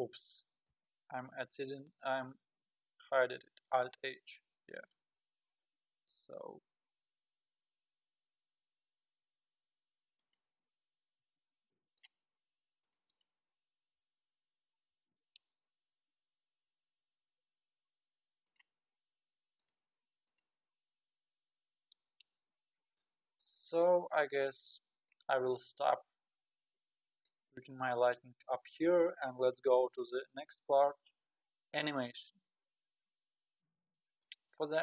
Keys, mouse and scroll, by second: 0.7 space, 1.9-3.8 drag, 3.8 alt+h, 4.8 click, 6.6 g, 11.5-12.8 middle drag, 12.8-13.4 drag, 14.0 g, 15.1 KP_3, 15.7 g, 19.6-21.0 drag, 21.4 scroll down 3, 23.0-23.8 middle drag, 23.8-24.2 scroll up 5, 24.8 scroll up 3, 32.8-33.7 scroll down 4, 34.2-34.8 drag.